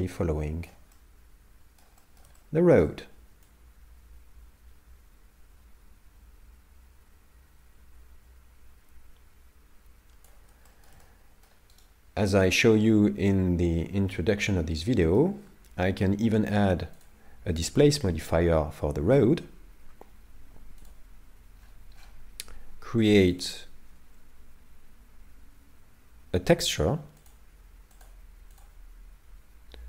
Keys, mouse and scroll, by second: 1.0 middle click, 2.0 shift+middle click, 2.4 middle click, 3.5 click, 10.7 shift+middle click, 11.0 middle click, 11.8 right click, 14.1 middle click, 17.0 click, 21.5 scroll down 1, 23.4 click, 23.4 scroll down 17, 27.3 click.